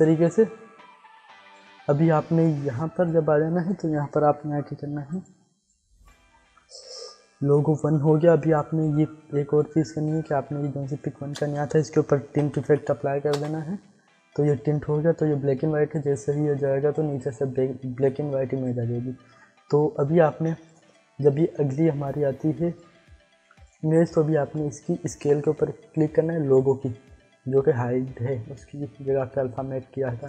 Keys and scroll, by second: 11.3 ctrl+space, 12.0-13.2 typing, 13.4 Return, 25.2 s.